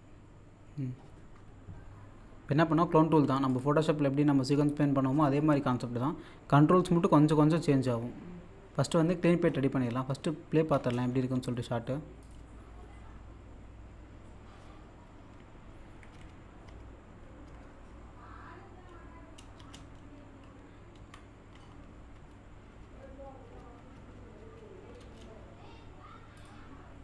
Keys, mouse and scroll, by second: 3.5 click, 7.2-8.6 scroll up 1, 9.5-10.7 scroll down 1, 10.8 space, 12.2 click, 13.7-14.3 scroll down 1, 16.2 F1, 16.7 F2, 18.4-18.8 scroll up 1, 19.5 scroll down 1, 19.5 space, 21.0 f, 22.1 F2, 23.9 F3, 24.0 F1, 24.4 F3, 25.0 space, 26.4 click.